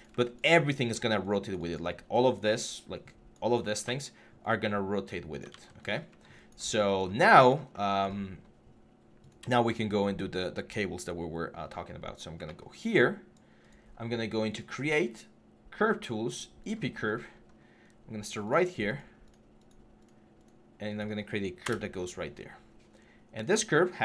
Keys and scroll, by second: 5.4 ctrl+z, 21.4 Return.